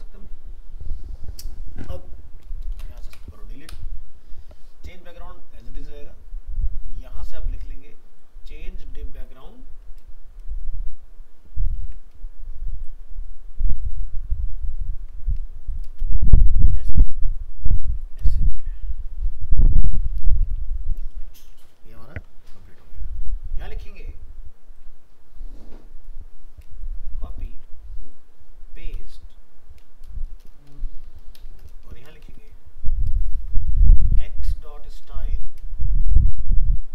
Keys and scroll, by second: 11.8 ctrl+c, 16.0 ctrl+v, 21.9 ctrl+s, 27.5 ctrl+c, 29.0 ctrl+v, 33.2 shift+Right.